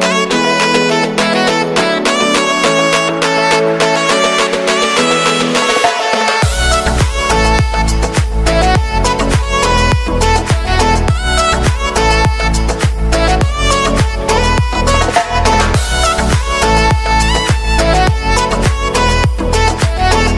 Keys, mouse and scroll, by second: 0.4 shift+a, 1.4-1.9 scroll down 2, 1.9 Tab, 2.5 s, 4.2 click, 4.7 click, 5.3 shift+click, 5.8 scroll down 1, 6.0 g, 7.4 e, 10.4 click, 11.1 shift+click, 11.7 ctrl+b, 14.0 right click, 14.6 Tab, 14.9-16.3 right drag, 16.3-17.3 middle drag, 17.3-17.7 scroll up 5, 17.7-18.6 shift+middle drag, 18.6-18.9 scroll up 4, 18.9 click, 19.4 shift+middle click, 20.1 scroll up 2.